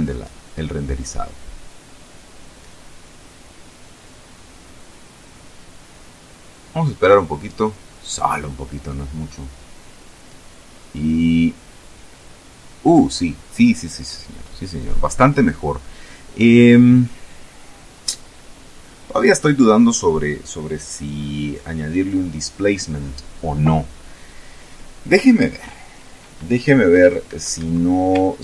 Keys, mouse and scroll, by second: 26.0 Escape, 27.6 ctrl+s, 28.0 ctrl+click.